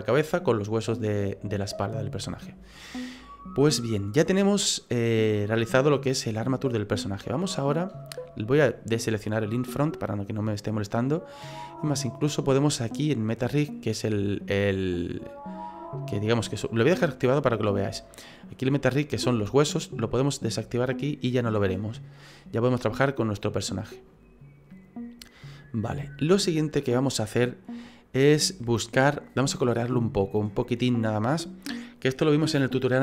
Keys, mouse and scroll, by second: 0.1 right click, 1.1 middle click, 2.7-3.8 scroll down 5, 3.8 middle click, 9.5 click, 10.0 middle click, 15.1 middle click, 17.5 click, 18.0 middle click, 18.5-19.7 scroll up 4, 20.9 click, 21.4 scroll down 2, 21.7 middle click, 24.7 click, 25.7 scroll down 3, 26.0 shift+middle click, 26.6 middle click, 29.7-30.2 scroll up 4, 30.2-30.6 scroll down 2.